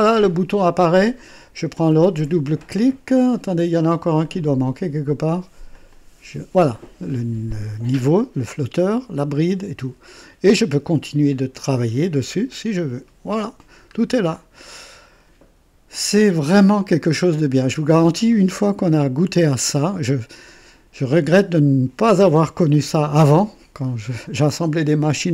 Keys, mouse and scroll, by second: 1.7 click, 4.1 click, 5.6 click, 12.4 click, 13.4 scroll up 1, 13.9 scroll down 1, 14.5-15.3 right drag, 16.2-17.8 drag, 18.7-20.5 drag.